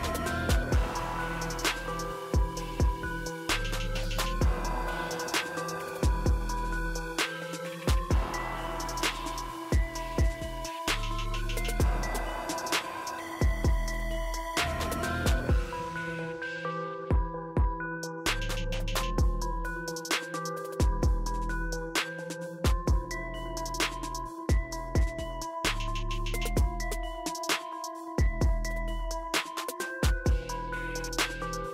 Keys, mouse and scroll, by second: 3.4 click, 9.4 click, 9.5 click, 13.1 click, 15.2 click, 17.8 ctrl+click, 25.1-28.7 drag, 31.3 click.